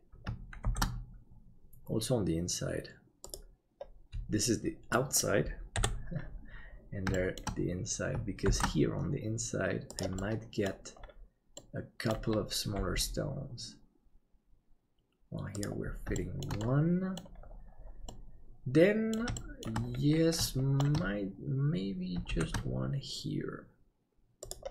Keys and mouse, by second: 0.7 shift+d, 5.0 middle click, 5.7 KP_7, 7.3 shift+middle click, 8.5 shift+d, 10.2 middle click, 11.6 middle click, 12.7 g, 16.2 shift+middle click, 16.7 middle click, 18.2 middle click, 19.4 shift+middle click, 20.5 shift+middle click, 22.3 shift+d.